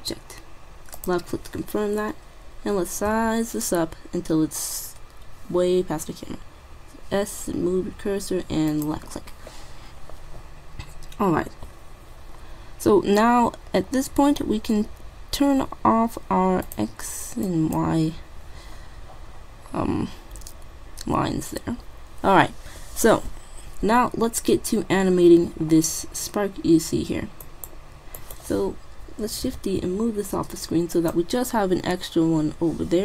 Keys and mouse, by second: 3.1 s, 10.9 middle click, 16.7-19.3 drag, 20.0 middle click, 22.6-23.9 middle drag, 25.0-26.8 middle drag, 27.0 middle click, 27.8 right click, 28.5 right click, 29.5 middle click, 29.7 shift+d, 30.5 middle click.